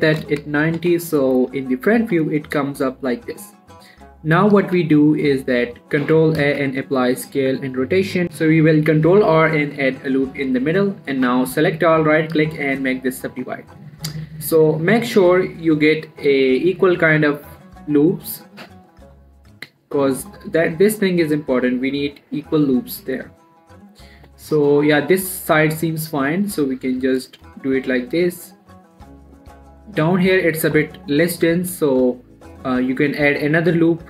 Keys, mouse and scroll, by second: 3.0 middle click, 3.4 scroll up 1, 3.6 middle click, 5.0 ctrl+a, 7.0 ctrl+a, 7.6 click, 8.2 right click, 9.5 ctrl+r, 10.0 click, 10.2 right click, 10.4 scroll down 1, 10.7 middle click, 11.2 scroll up 1, 11.6 a, 12.3 right click, 13.1 click, 13.5 middle click, 13.8-14.2 scroll up 1, 14.2 middle click, 14.7 scroll up 1, 15.0 middle click, 18.2 click, 19.6 middle click, 20.3-20.8 scroll up 1, 20.8 middle click, 21.9-23.7 middle drag, 23.7 scroll down 1, 24.7-26.7 middle drag, 26.7 click, 28.1-33.0 middle drag, 33.0 click, 33.9-34.0 middle drag.